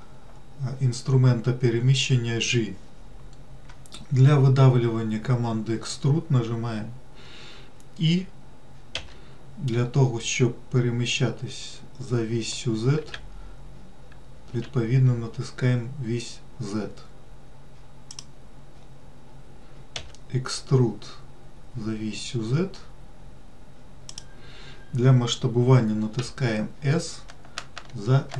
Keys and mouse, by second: 9.3 e, 20.3 e, 26.5 s.